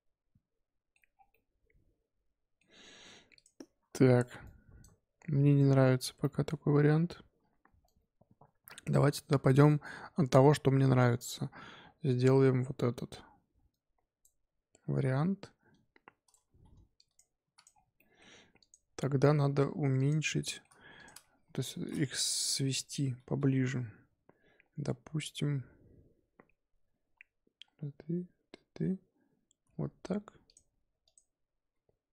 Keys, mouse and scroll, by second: 1.1 scroll down 4, 1.3-2.6 middle drag, 2.6-3.3 scroll up 7, 3.3 click, 16.9 click, 17.4 x, 17.7 scroll down 4, 17.9-18.6 middle drag, 18.6 click, 19.5 x, 20.4-20.9 shift+middle drag, 20.9 click, 21.4 KP_7, 22.1 scroll up 3, 22.3-24.3 scroll down 1, 29.7 g, 31.0 click, 31.6 g.